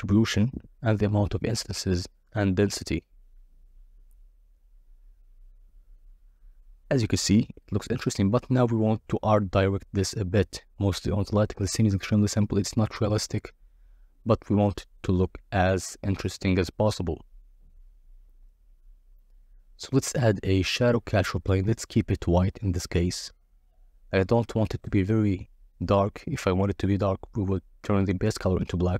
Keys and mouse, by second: 3.5 middle click, 4.1 shift+a, 8.6-12.4 typing, 9.3 Return, 11.2 Return, 12.0 Return, 14.2 r, 14.4 z, 16.3 click, 16.8 g, 16.9 shift+z, 20.3 KP_0, 22.3 click, 23.1 click, 23.6 drag, 25.0 click, 25.7 click, 27.7 s, 28.6 click.